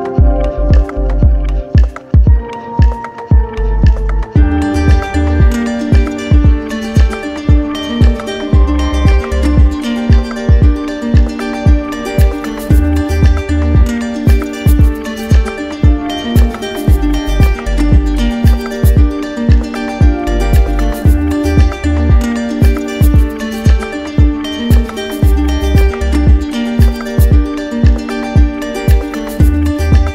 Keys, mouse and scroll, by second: 1.0 click, 1.7 right click, 5.2 right click, 6.0 right click, 8.8 click, 10.8 click, 12.0 shift+right click, 12.7 right click, 14.2 right click, 15.4 click, 17.5 right click, 18.2 alt+right click, 19.8 right click, 20.2 shift+right click, 21.5 shift+right click, 21.9 right click, 23.0 right click, 24.5 click, 25.8 click, 26.4-27.3 typing, 29.1 right click, 30.0 alt+right click.